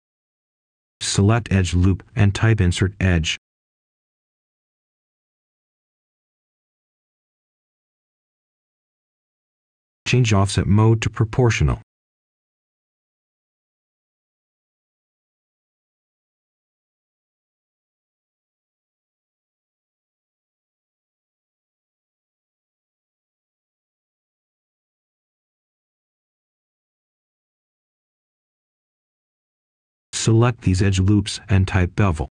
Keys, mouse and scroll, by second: 0.2 right click, 0.8 scroll up 1, 1.0 Tab, 1.9 right click, 3.2 typing, 5.6 Return, 11.1 click, 15.9 right click, 16.9 Tab, 21.1-28.1 ctrl+shift+drag, 28.1-30.3 right drag, 30.4-30.9 scroll up 1, 30.9 Tab, 31.4 right click.